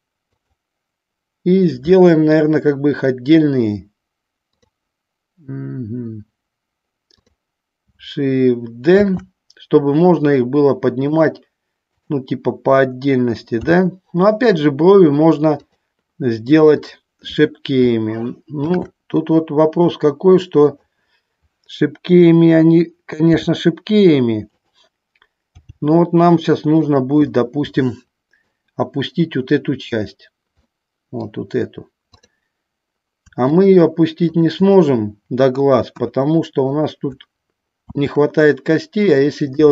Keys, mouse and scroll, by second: 0.5 click, 4.6 click, 9.3 shift+d, 11.1 click, 12.1 click, 13.7 g, 15.7 click, 16.9 click, 18.9 shift+d, 20.8 click, 23.5 r, 25.8 g, 27.0 click, 27.4-28.7 middle drag, 30.9 middle click, 36.0 KP_1, 38.0 shift+d.